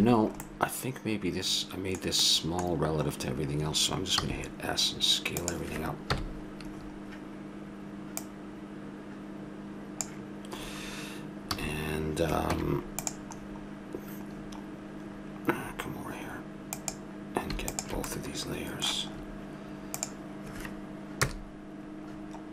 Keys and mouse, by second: 4.2 s, 6.0 KP_1, 6.8-8.2 middle drag, 8.2 click, 11.5 a, 12.5 Tab, 16.7-19.5 drag, 18.1-19.7 middle drag, 18.1-19.4 right drag, 20.0-21.2 drag, 21.2 KP_0.